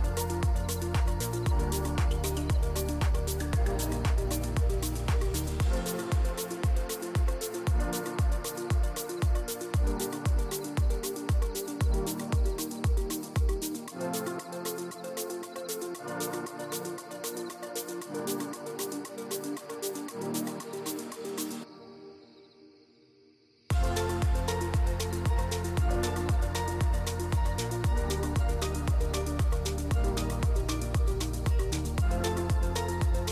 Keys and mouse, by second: 0.6 click, 3.4 click, 4.5 click, 5.2 click, 9.9 ctrl+s, 10.3 click, 12.4 click, 13.5 click, 19.7 ctrl+z, 20.6 click, 22.9 ctrl+s, 23.9 click, 27.2 ctrl+s, 28.1 click, 30.0-31.0 drag, 31.9 ctrl+z, 32.7 ctrl+s.